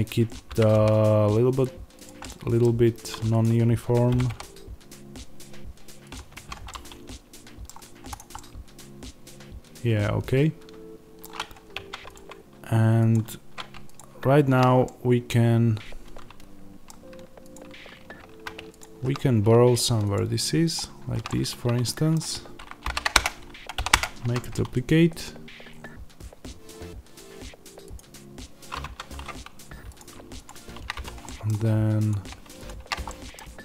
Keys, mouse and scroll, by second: 0.5 g, 2.2-3.3 middle drag, 3.3 click, 4.0 g, 6.0 click, 6.3 Tab, 6.6-8.1 middle drag, 7.6-8.1 scroll down 2, 8.1 click, 8.3-12.0 middle drag, 11.6 Tab, 12.0 click, 14.7-17.4 middle drag, 17.4 click, 21.2-27.9 middle drag, 22.7 shift+d, 23.1 Return, 23.8 p, 23.9 Return, 24.1 Tab, 27.9 click, 28.7 Tab, 29.9 click, 30.9 f, 31.1 middle click, 32.0 click, 32.9 f, 33.0 middle click.